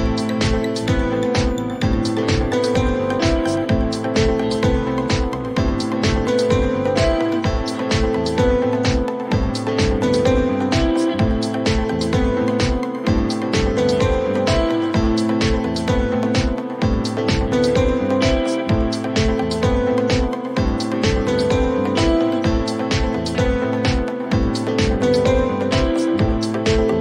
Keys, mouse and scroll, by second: 1.5 click, 2.0 typing, 2.3 Return, 6.1 click, 6.5 1, 6.6 Return, 9.3 click, 10.4 click, 11.9-12.8 scroll down 1, 12.8-13.8 scroll down 1, 18.3 click, 18.7-19.4 typing, 19.5 Return, 22.3 click, 23.4 click, 24.9 click.